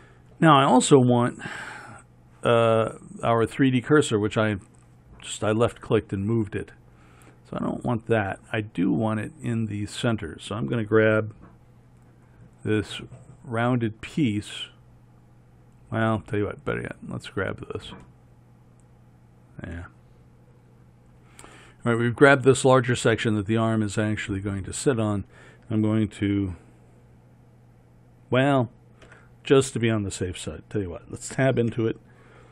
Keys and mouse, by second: 3.7-9.7 middle drag, 9.7-11.2 right drag, 11.2 KP_1, 17.0-18.2 right drag, 29.2 Tab, 31.8 a.